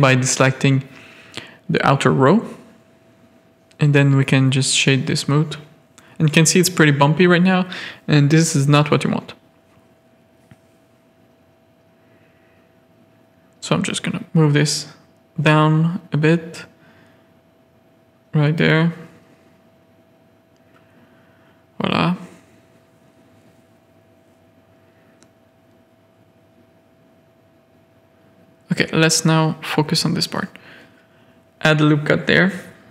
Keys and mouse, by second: 0.8 Tab, 1.4-2.5 middle drag, 5.3-6.7 middle drag, 6.8 shift+middle click, 7.8 middle click, 8.4 Tab, 8.5-8.8 middle drag, 9.2 z, 9.4 a, 9.7 middle click, 10.3 KP_3, 10.9 shift+click, 12.8 shift+click, 13.1 z, 13.6 g, 15.6 shift+middle click, 15.8 z, 16.0 a, 16.9 z, 17.3 g, 18.3 shift+middle click, 18.9 z, 20.3 z, 20.3 g, 22.0 Tab, 22.2 middle click, 22.9 middle click, 23.3 Tab, 23.6 click, 24.0 ctrl+r, 24.8 Tab, 25.2 alt+a, 25.4 drag, 25.7 z, 26.0-27.1 drag, 27.1 Tab, 27.4 click, 27.6 z, 27.7 a, 27.8 click, 28.1 shift+click, 28.5 z, 29.2 click, 29.6 g, 30.6 ctrl+r, 32.2 click, 32.6 Tab, 32.8 click.